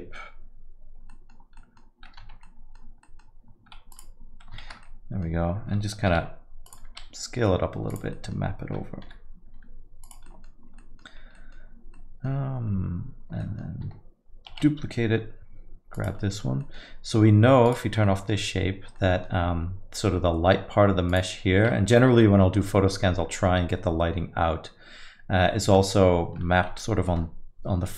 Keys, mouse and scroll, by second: 1.1 middle click, 1.5 scroll down 3, 1.6 middle click, 2.5 Tab, 3.0 middle click, 3.9 click, 4.9 shift+z, 5.0 middle click, 6.1 g, 6.9 s, 8.2 middle click, 9.1 g, 10.3 middle click, 10.6 scroll down 1, 10.8 middle click, 11.2 scroll up 1, 11.4 middle click, 12.0 middle click, 13.4 middle click, 15.2 shift+d, 16.2 middle click, 16.7 middle click, 17.7 click, 18.1 middle click, 19.0 middle click, 21.1 click, 22.0 r.